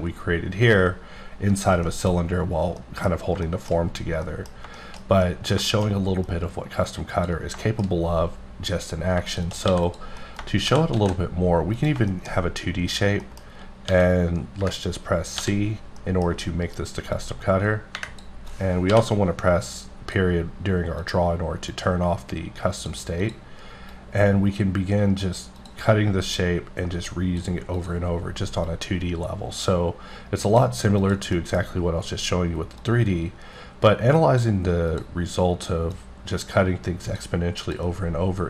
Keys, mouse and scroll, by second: 1.9 middle click, 2.2-2.8 scroll down 1, 2.8 middle click, 3.8-4.2 scroll down 1, 4.2 middle click, 7.1 click, 7.6 shift+middle click, 9.3 shift+click, 9.7 x, 9.8 click, 10.2 middle click, 10.7 shift+c, 11.0 shift+a, 11.7 click, 12.1 shift+middle click, 12.5-12.9 scroll up 2, 13.2 middle click, 13.9 d, 15.4 typing, 16.0 middle click, 17.2 click, 18.5 click, 21.0 click, 21.7 click, 23.2 click, 23.9 click, 25.6 click, 26.3 click, 27.8 click, 28.7 click, 31.0 click, 31.4 middle click, 32.8 click, 34.9 click, 35.9 click, 37.6 click, 38.3-38.4 scroll up 2.